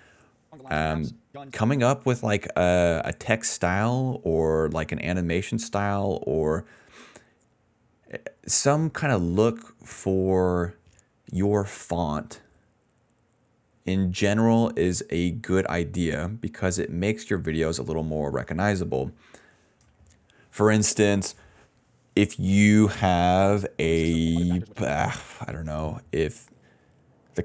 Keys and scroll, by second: 0.4 space, 1.4 space, 1.9 d, 6.1 BackSpace, 8.6 Return, 8.7-10.5 typing, 21.0 s, 21.9 ctrl+s, 23.3 space, 23.9 d, 24.7 space, 27.0-27.4 typing.